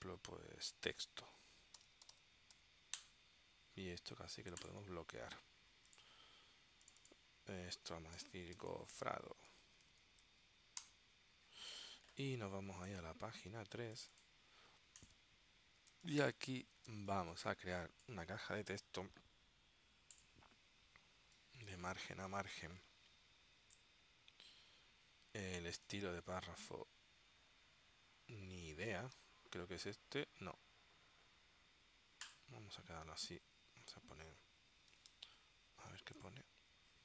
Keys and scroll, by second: 1.6-3.2 typing, 8.1-10.9 typing, 10.9 Return, 16.0 space, 17.0 space, 35.1 super+Tab.